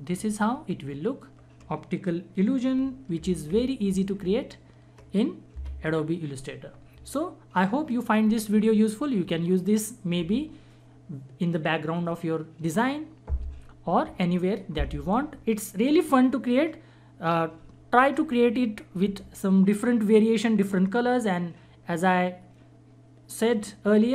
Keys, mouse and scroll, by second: 3.1 ctrl+-, 5.5 Escape.